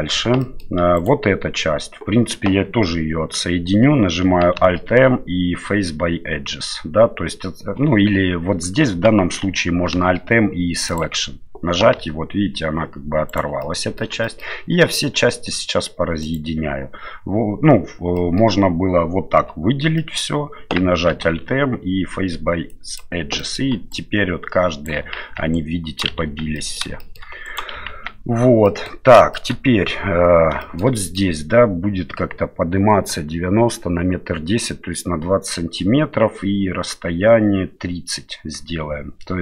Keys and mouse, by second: 0.1 Tab, 0.4 middle click, 0.9 right click, 4.6 alt+m, 9.9 alt+m, 12.0 g, 13.6 middle click, 14.2 shift+middle click, 16.2 right click, 18.2 middle click, 19.4 l, 19.9 middle click, 21.1 alt+m, 23.4 middle click, 23.9 right click, 25.2 ctrl+z, 25.5 right click, 26.2 ctrl+z, 26.5 middle click, 27.0 middle click, 27.4 right click, 27.9 ctrl+z, 28.6 middle click, 29.3 middle click, 30.6 shift+middle click, 30.9 middle click.